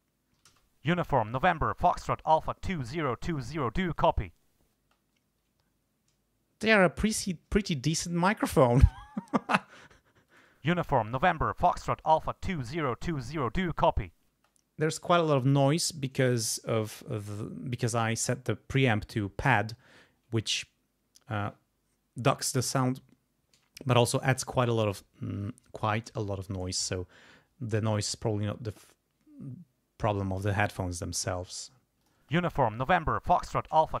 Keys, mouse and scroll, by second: 0.5 space, 4.8 space, 10.3 click, 10.5 space, 14.3 space, 26.5 click, 32.0 click, 32.2 space.